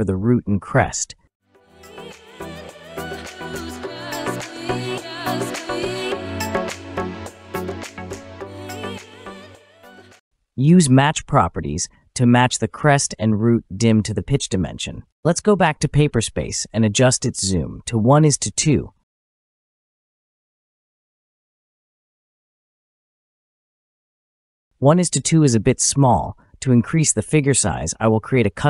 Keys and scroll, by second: 2.0 space, 8.6 typing, 10.3 typing, 15.1 Return.